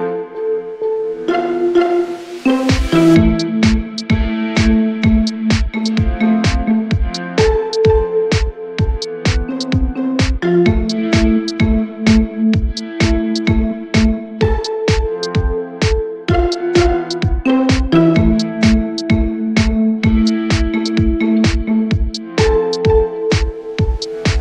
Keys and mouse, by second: 0.5 alt+middle click, 1.3 alt+click, 2.7 alt+middle click, 3.6-5.3 drag, 6.3 click, 9.7 alt+middle click, 11.4 click, 12.0-13.0 drag, 15.6 alt+click, 16.2 click, 17.1 click, 17.6 click, 20.0 alt+middle click, 21.0 alt+click, 21.6 alt+middle drag, 22.1 alt+click, 22.6 alt+middle click, 22.9 click.